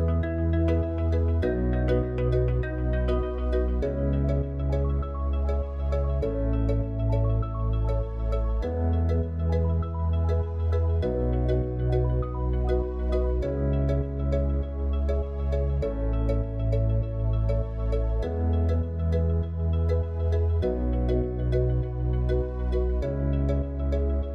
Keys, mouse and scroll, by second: 0.0 click, 1.6-4.5 drag, 12.8-24.3 drag.